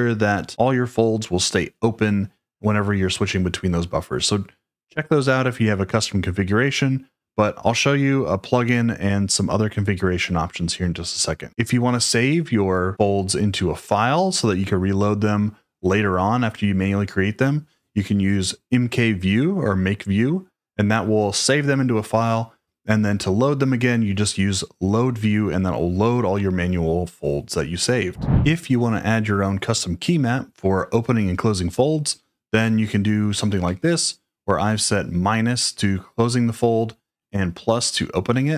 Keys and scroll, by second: 33.6 typing.